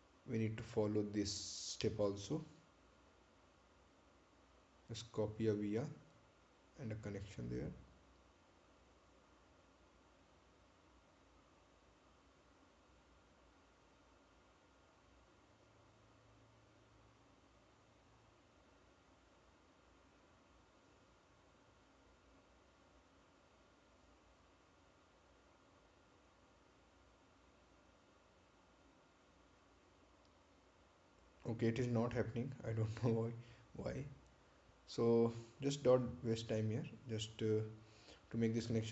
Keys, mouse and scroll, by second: 0.0-0.4 scroll down 1, 6.2 click, 11.2 click, 14.6 shift+click, 23.5 shift+click, 30.0 shift+click, 37.1-38.2 scroll up 1, 38.2-38.7 scroll down 1.